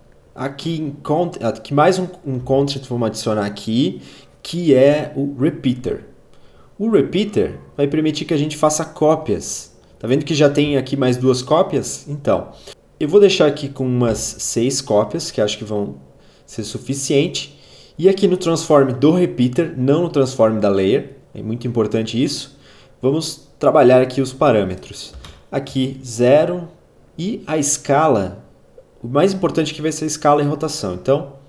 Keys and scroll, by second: 14.1 6, 25.2 0, 25.3 Return.